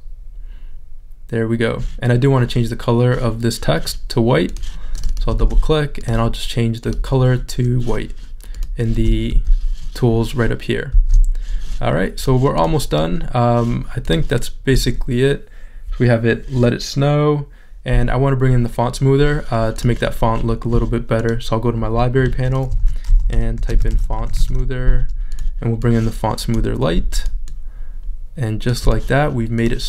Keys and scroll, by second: 5.5 super+a, 9.4 shift+super+z.